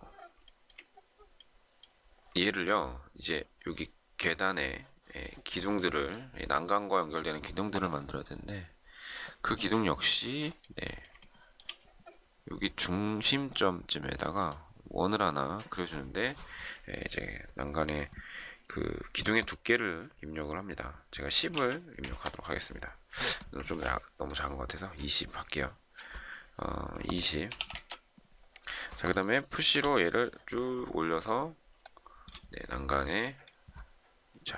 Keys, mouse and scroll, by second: 0.4 shift+middle click, 2.3 shift+middle click, 11.1 shift+middle click, 20.8-21.8 typing, 21.8 Return, 23.6 ctrl+z, 27.1-28.0 typing, 29.6 p, 31.8 shift+middle click.